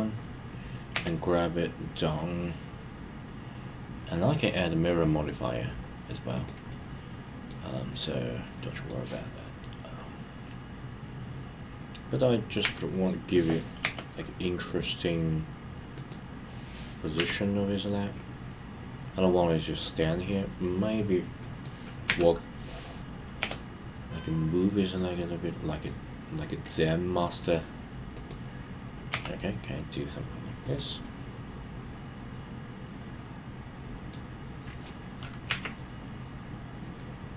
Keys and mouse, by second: 6.3 click, 6.7-7.5 middle drag, 8.0-8.9 middle drag, 15.9 click, 21.4 middle click, 28.1 click, 30.7 click, 31.0-34.1 middle drag, 37.0-37.3 middle drag.